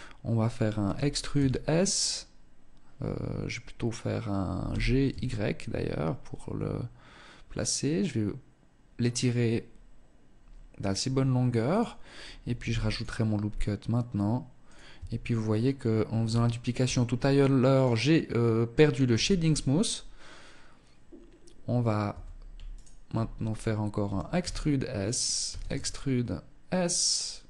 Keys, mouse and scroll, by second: 10.9 click, 11.7 ctrl+r, 13.9 click, 14.1 Tab, 15.9 t, 16.9 click, 18.3 t, 21.3 Tab, 21.9 alt+right click, 23.2 e, 24.6 e, 26.9 e.